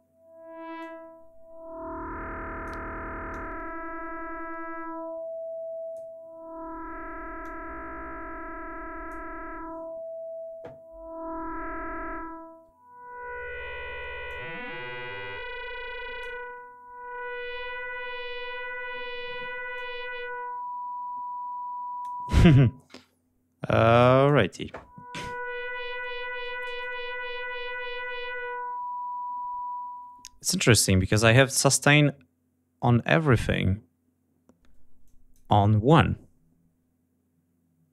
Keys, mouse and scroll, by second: 0.8-2.8 drag, 3.3-6.1 drag, 7.4-9.3 drag, 9.7-10.2 scroll up 4, 14.2-16.4 drag, 17.2 scroll up 2, 19.7-22.2 drag, 24.0 click, 35.0 click.